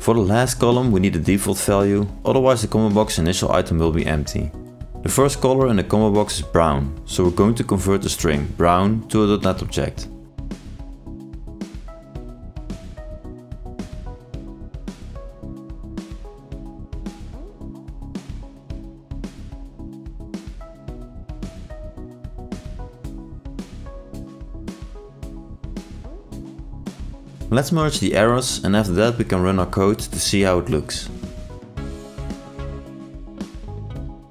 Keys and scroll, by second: 3.9 ctrl+space, 29.1 ctrl+space, 31.1 ctrl+i.